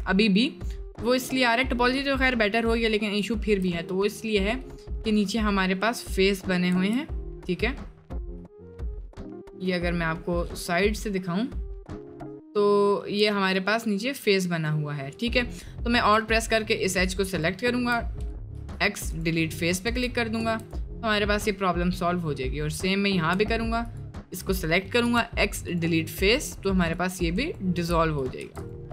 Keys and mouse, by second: 0.2 middle click, 0.7 middle click, 1.4 middle click, 1.9 middle click, 2.4 middle click, 2.9 middle click, 3.4 shift+middle click, 5.4 middle click, 6.2 middle click, 6.8 4, 7.1-8.2 middle drag, 8.6 click, 9.6 click, 10.8 middle click, 11.9 middle click, 13.5 alt+click, 16.2 alt+click, 18.5 x, 19.9 Tab, 20.6 middle click, 21.3 middle click, 22.2 middle click, 23.9 alt+click, 25.0 x, 28.5 Tab.